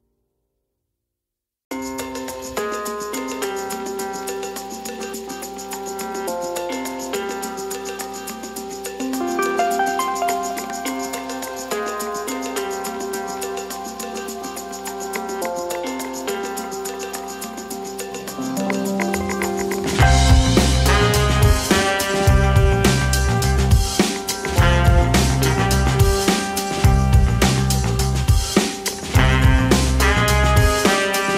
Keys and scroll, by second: 3.8 KP_8, 5.8 KP_0, 6.5 KP_8, 6.7 KP_0, 7.6 space, 12.7 space, 15.8 shift+2, 17.5 space, 28.4 KP_8, 29.0 space.